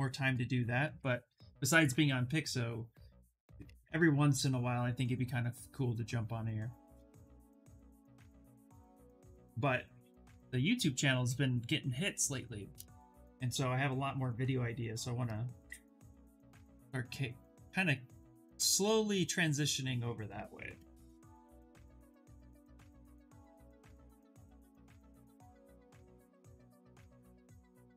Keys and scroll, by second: 25.0 s.